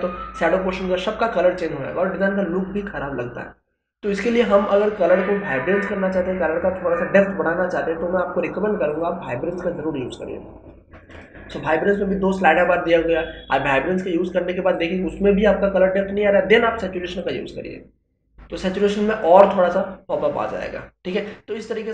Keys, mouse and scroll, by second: 8.9 click, 11.1 click, 13.7-17.2 drag, 17.2-21.9 drag.